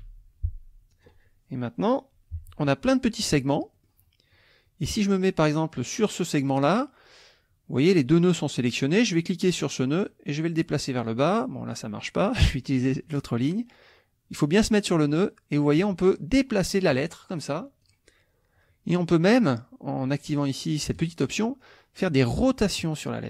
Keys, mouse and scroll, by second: 0.9 click, 2.9-4.0 middle drag, 5.9 click, 9.9-11.9 drag, 12.3 click, 14.9-17.1 drag, 17.8 click, 21.0 click, 22.6 click.